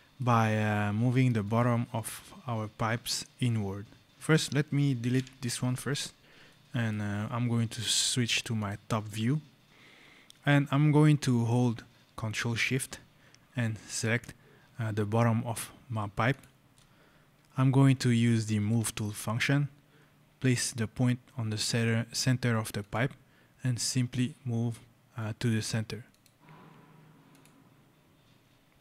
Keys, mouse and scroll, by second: 1.3 click, 4.1 click, 5.0 Delete, 6.3 right click, 8.4 click, 9.7 scroll, 10.9 right click, 16.1 ctrl+shift+click, 18.5 click, 22.7 click, 25.9 click, 27.9 scroll.